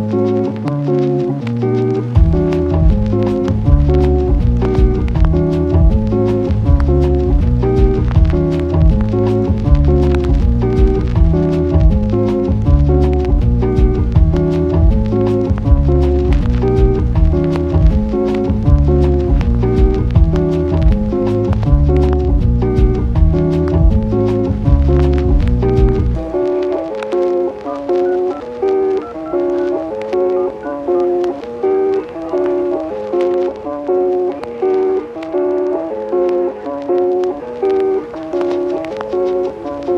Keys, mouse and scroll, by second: 2.2 click, 3.3 click, 3.3 Tab, 4.1 click, 4.4 click, 5.1 click, 5.3 click, 5.5 click, 5.7 click, 6.1 shift+click, 6.2 click, 6.6 ctrl+click, 6.8 click, 7.5 click, 8.6 click, 9.3 click, 9.6 click, 9.8 click, 10.4 click, 11.1 click, 11.7 shift+middle click, 11.9 click, 12.1 click, 12.7 click, 12.9 click, 14.4 click, 15.3 click, 16.0 click, 17.1 click, 18.8 Tab, 19.3 click, 21.3 click, 21.5 click, 21.9 click, 23.3 click, 23.7 shift+click, 23.8 shift+click, 24.8 click, 26.4 click, 27.1 click, 27.4 click, 28.1 click, 28.4 shift+click, 28.5 shift+click, 29.0 shift+click, 29.3 click, 30.1 click, 31.5 click, 33.8 click, 35.2-37.7 drag, 38.3 click.